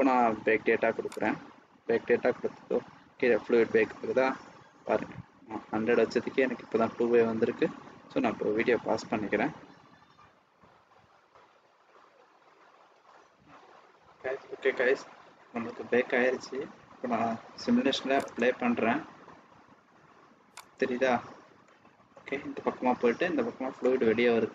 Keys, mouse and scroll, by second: 1.0 click, 18.2 click, 20.9 click, 21.5 middle click.